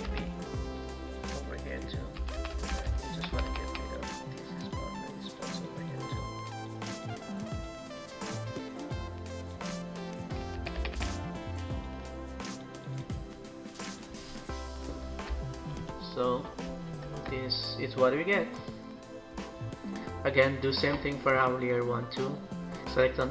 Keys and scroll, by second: 2.1-3.5 typing, 10.8 typing, 15.6 ctrl+-, 16.2 ctrl+-, 16.8 ctrl+=.